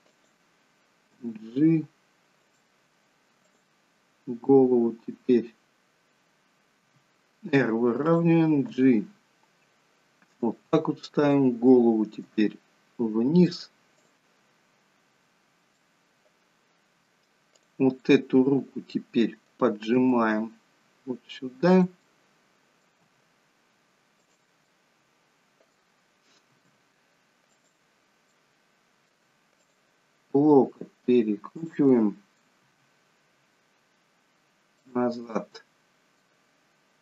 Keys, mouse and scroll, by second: 1.2 g, 3.5 click, 5.6 middle click, 5.6 click, 7.0 r, 8.8 g, 11.2 click, 12.3 r, 15.8 middle click, 17.6 click, 18.1 middle click, 20.0 g, 22.2 middle click, 23.1 g, 24.7 middle click, 26.6 r, 28.3 middle click, 29.6 click, 30.6 r, 31.9 middle click, 32.7 r, 35.2 middle click.